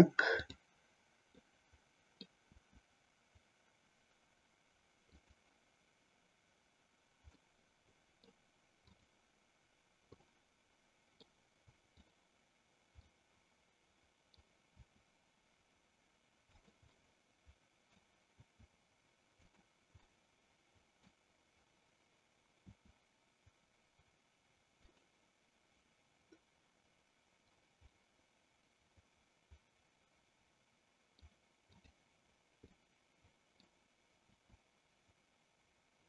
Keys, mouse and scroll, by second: 0.5 click, 1.6 middle click, 2.6 r, 5.4 click, 7.4-8.5 middle drag, 9.0 click, 10.5 middle click, 12.1 click, 13.1-14.4 middle drag, 14.8 r, 17.0-18.1 middle drag, 18.5 r, 20.2-21.2 middle drag, 22.7 r, 25.0 click, 28.0-31.3 middle drag, 31.7 click, 32.9 middle click, 34.4 r.